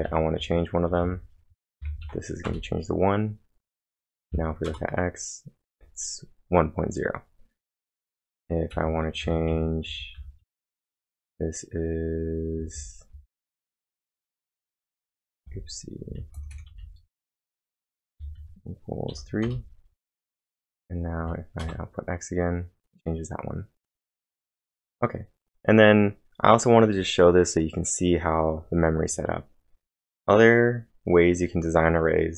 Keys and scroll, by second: 0.0-2.0 typing, 2.5 Return, 4.7 Return, 4.7 x, 8.5-10.9 typing, 14.0 Return, 14.0-14.8 typing, 18.0 space, 18.2 =, 19.1 3, 19.4 Return, 20.2 Up, 21.2 Up, 21.6 Return, 23.5-24.2 typing.